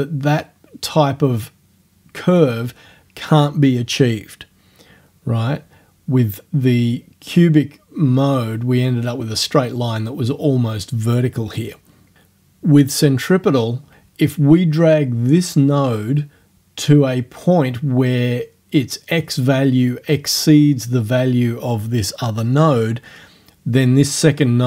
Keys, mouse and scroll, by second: 24.4-24.6 drag.